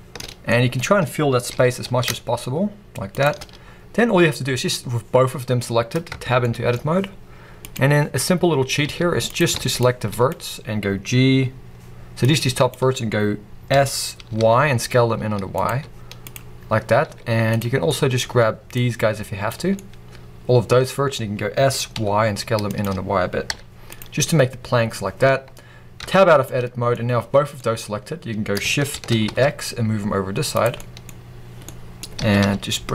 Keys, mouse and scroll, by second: 0.4 middle click, 1.4 g, 1.7-3.1 middle drag, 3.1 shift+click, 6.0 Tab, 6.0-7.6 middle drag, 7.6-8.8 drag, 8.8 z, 9.4 alt+a, 9.7 click, 13.6 s, 15.6 z, 17.8 middle click, 18.6 click, 19.7-20.9 middle drag, 21.5 s, 22.7 click, 23.4 z, 24.1 scroll down 1, 24.1 middle click, 25.9 Tab, 26.3 middle click, 27.5-30.5 middle drag, 28.8 shift+d, 30.5 click, 30.6-32.9 middle drag, 31.0-31.6 scroll up 2, 32.1 g.